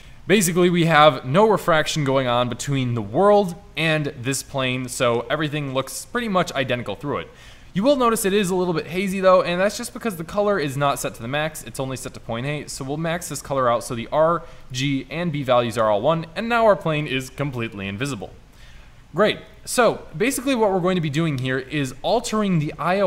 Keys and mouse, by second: 5.6-10.0 middle drag, 12.9-14.7 middle drag, 18.9-19.4 drag.